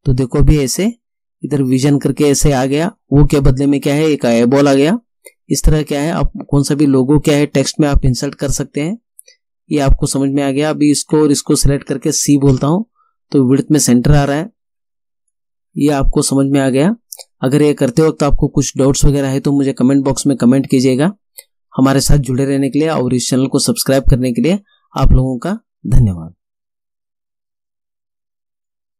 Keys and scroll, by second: 12.5 c.